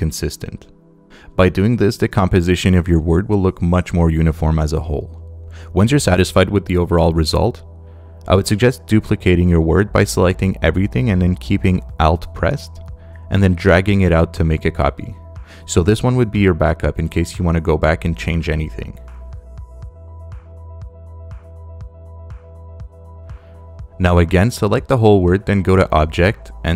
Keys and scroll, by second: 0.5 Left, 0.9 Down, 3.0 Down, 11.7 space, 12.7 alt+space, 16.1 alt+shift+space, 16.9 space, 19.4 space.